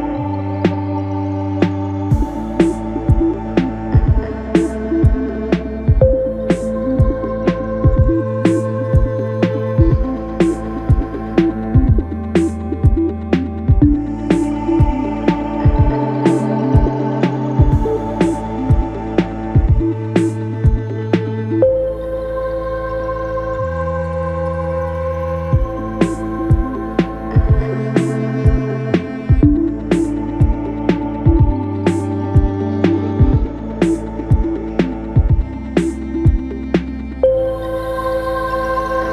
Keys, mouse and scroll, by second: 1.0 s, 4.8 Tab, 5.2 middle click, 6.0 3, 6.6 click, 7.3 KP_1, 9.3-10.5 shift+middle drag, 10.5 s, 12.5 Tab, 13.2 ctrl+a, 14.3 Tab, 15.0 ctrl+b, 19.7 middle click, 20.6-21.4 scroll up 1, 21.4-21.9 scroll up 1, 21.9-23.8 drag, 23.8 KP_1, 25.1 s, 28.3 Tab, 28.9-29.7 right drag, 29.7-30.1 scroll up 2, 30.1 scroll down 2, 31.1 click, 31.4 scroll down 1, 32.3-33.4 drag, 35.1-37.9 drag, 37.9 g.